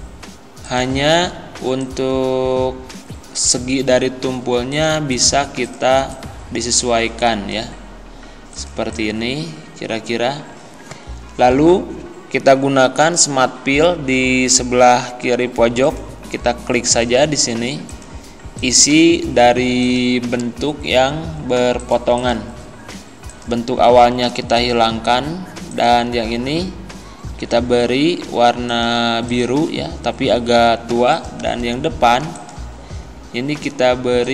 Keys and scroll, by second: 24.1 Delete.